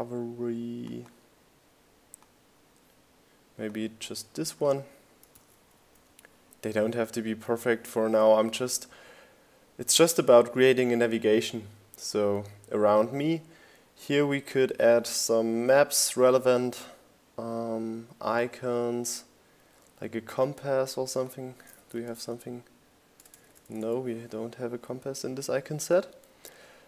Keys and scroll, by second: 0.4 super+c, 2.3 super+v, 16.7-18.2 typing, 24.1 super+c, 26.1 super+v.